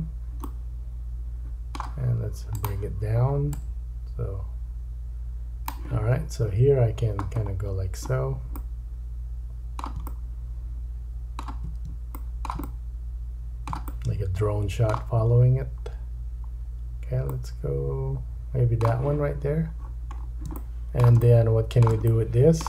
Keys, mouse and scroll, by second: 0.6-2.5 middle drag, 2.5-8.6 drag, 6.6-8.2 scroll down 6, 8.2-8.6 scroll down 4, 8.6 middle click, 12.7 middle click, 13.9 middle click, 15.5 scroll down 1, 16.1-17.0 scroll down 1, 17.3 middle click, 19.8-20.4 scroll up 4, 20.6 shift+middle click, 21.3 middle click, 22.1 middle click.